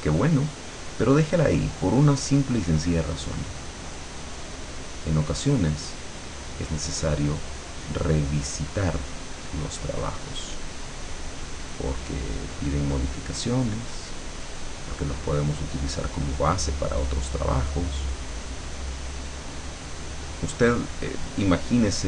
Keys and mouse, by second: 2.0-6.9 drag, 8.0-12.5 drag, 12.8 click, 14.4-15.8 drag, 16.0 click, 17.2-19.8 drag, 20.1-22.0 drag.